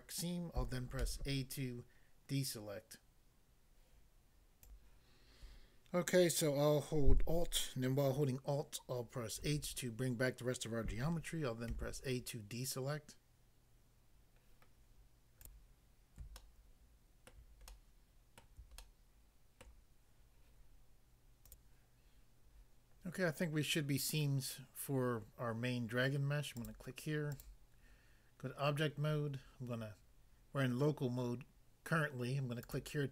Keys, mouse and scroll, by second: 1.0 a, 4.6 click, 9.4 alt+h, 11.6 a, 15.4 click, 16.4 ctrl+middle click, 18.8 shift+middle click, 21.4 click, 21.6 click, 26.6 click, 27.4 click, 32.7 click, 32.8 click.